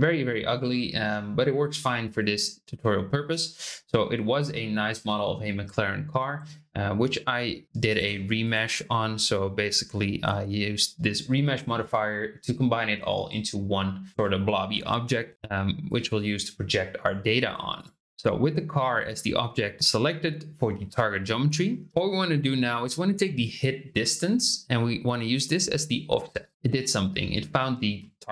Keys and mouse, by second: 8.5-12.3 drag, 15.8 click, 24.1-26.5 drag, 26.5-27.1 middle drag.